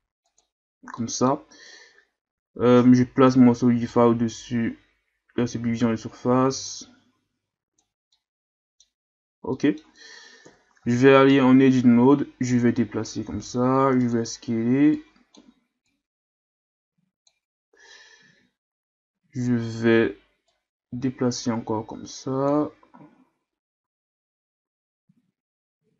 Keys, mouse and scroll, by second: 0.4-1.0 drag, 1.0-3.3 middle drag, 3.3 click, 5.3-8.1 drag, 8.1 scroll up 1, 8.1-9.2 middle drag, 9.2 scroll down 2, 9.5-10.4 middle drag, 10.4 KP_1, 10.8 Tab, 11.8-12.5 scroll up 1, 12.5 click, 13.3 s, 15.0-17.8 drag, 17.8-19.8 scroll up 2, 19.8-20.5 scroll up 1, 20.5-23.5 drag, 23.8 s.